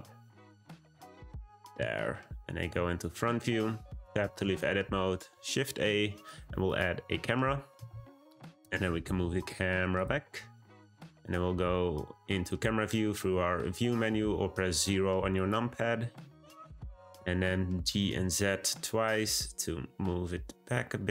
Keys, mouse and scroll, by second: 3.4 Tab, 4.6 shift+a, 8.3-8.6 middle drag, 8.6 g, 10.7 `, 16.6-17.8 scroll down 1, 17.8 g.